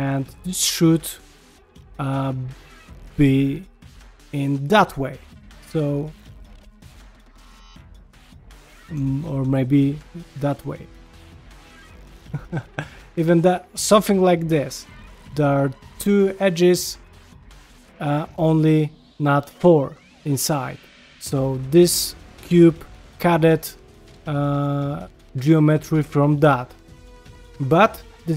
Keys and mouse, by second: 0.0 ctrl+middle click, 0.6 2, 1.2 click, 2.1 shift+click, 2.5 shift+click, 3.0 shift+click, 4.1 shift+click, 4.6 ctrl+x, 5.8 middle click, 6.5 click, 7.4 ctrl+z, 7.8 ctrl+z, 8.5 click, 9.1 shift+click, 9.6 ctrl+x, 10.1 middle click, 10.7 click, 11.1 ctrl+x, 12.1 click, 12.3 ctrl+x, 13.0 click, 13.5 middle click, 14.7 ctrl+middle click, 17.1 ctrl+middle click, 20.0 ctrl+middle click, 27.1 middle click, 27.7 ctrl+middle click.